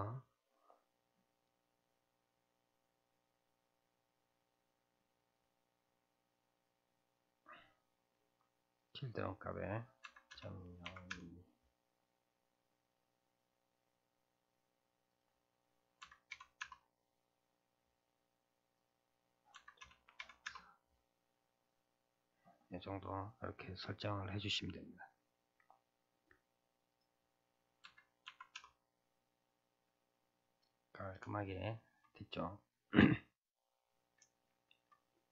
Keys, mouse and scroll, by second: 0.7-1.2 scroll down 9, 2.5 scroll down 3, 4.5-5.3 scroll up 2, 5.3-5.8 drag, 5.8 scroll down 4, 8.7-11.8 drag, 12.3-15.1 middle drag, 15.1-18.1 drag, 18.7-21.4 drag, 21.4-22.3 middle drag, 22.3-23.0 scroll down 1, 25.7-26.9 scroll down 4, 26.9-29.4 drag, 29.4-30.2 middle drag, 30.2-31.3 scroll down 2, 31.3-35.3 shift+middle drag.